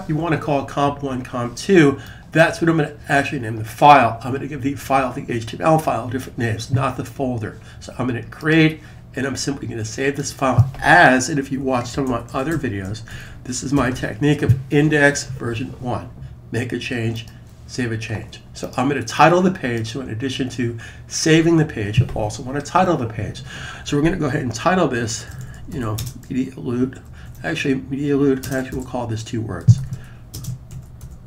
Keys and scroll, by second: 11.2-14.2 typing, 24.9-26.2 typing, 29.2-31.2 typing.